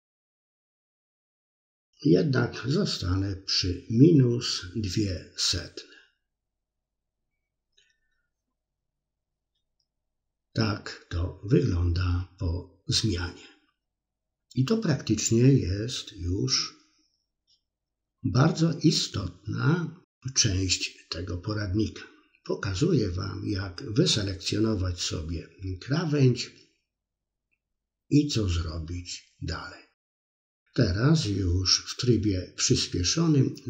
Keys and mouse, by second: 2.9 middle click, 5.6 Tab, 7.5-13.8 middle drag, 14.3 Tab, 21.2 Tab, 22.8 click, 23.7 click, 23.9 middle click, 26.9 alt+shift+click, 28.2 middle click, 29.1-30.3 alt+shift+drag, 30.5 middle click, 31.6 shift+click, 32.0 shift+click, 32.4 middle click, 32.7 shift+click, 33.0 middle click, 33.5 shift+click.